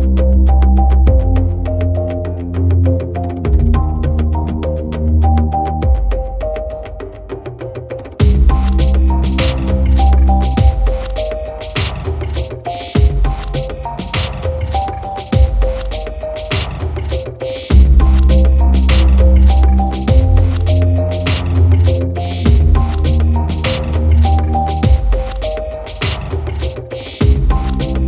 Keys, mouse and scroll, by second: 1.3 Tab, 2.6 Tab, 4.3 click, 7.4 Tab, 10.4 alt+h, 11.6 KP_1, 12.8 click, 13.3 g, 13.6 x, 16.1 click, 18.3 KP_3, 20.0 g, 20.1 z, 21.0 click, 21.9 shift+a, 23.5 Tab, 24.5 click, 26.1 shift+drag, 26.8 KP_7.